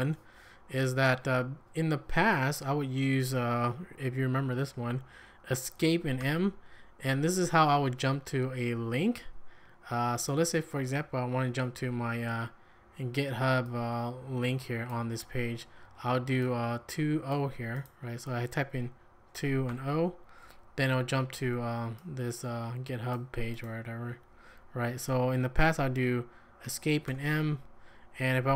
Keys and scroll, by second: 5.8 Escape, 6.2 m, 19.4 2, 19.7 o, 26.6 Escape, 27.1 m.